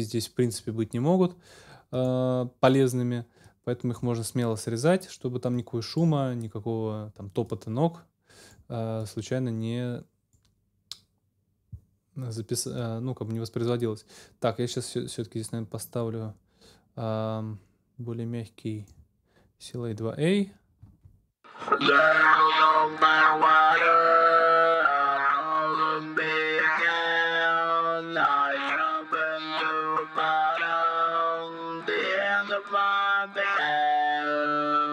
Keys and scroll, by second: 20.8 space.